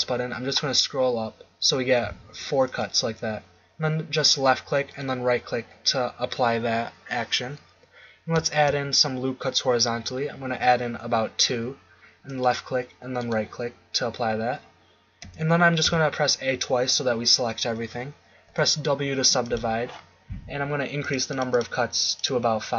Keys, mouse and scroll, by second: 5.0 click, 8.5 ctrl+r, 15.2 a, 15.8 a, 18.5 w, 21.0 click.